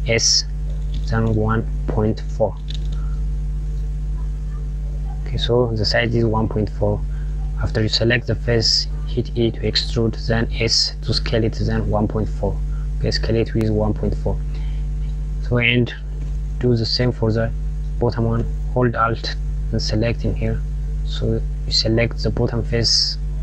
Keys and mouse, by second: 4.4 click, 13.0 click, 19.6 alt+click, 21.1 click, 23.2-23.4 drag.